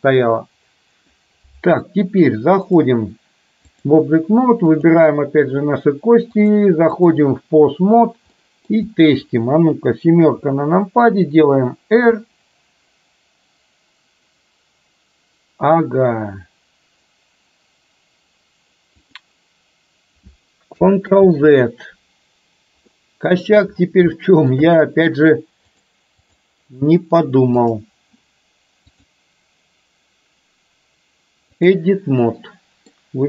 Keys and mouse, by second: 2.7-4.0 drag, 6.6-7.2 drag, 8.5 middle drag, 10.2 KP_7, 12.1 r, 21.1 ctrl+z, 23.0-23.5 middle drag, 24.2 shift+middle click, 25.7-26.5 drag, 27.7 click, 29.0-31.8 drag, 32.2 middle click.